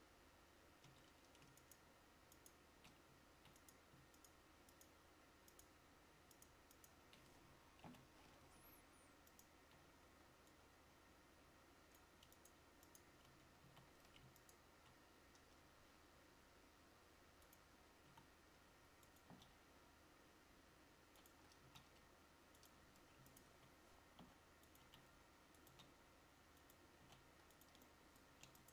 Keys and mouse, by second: 1.1 Tab, 8.0 ctrl+j, 13.4 Tab, 13.8 a, 24.3 g.